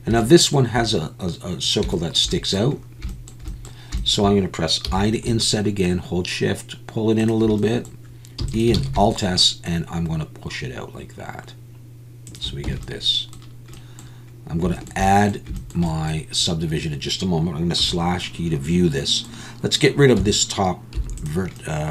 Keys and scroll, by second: 8.4 e, 8.9 alt+s, 12.7 Tab, 20.2 Tab, 21.0 3.